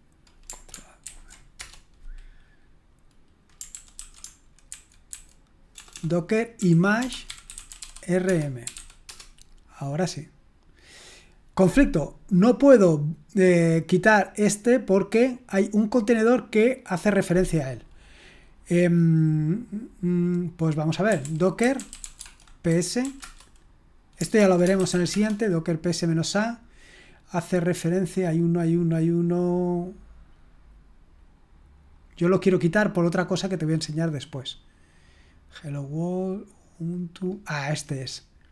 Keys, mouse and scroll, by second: 1.1 ctrl+alt+v, 1.6 Return, 3.7 ctrl+p, 4.0 ctrl+a, 4.7 alt+f, 5.1 alt+f, 5.8 alt+BackSpace, 6.6-9.2 typing, 20.8-25.4 typing, 24.4 ctrl+p, 30.8-31.3 scroll up 2, 31.8-32.7 scroll down 2, 33.4-35.0 scroll down 3, 38.4 click.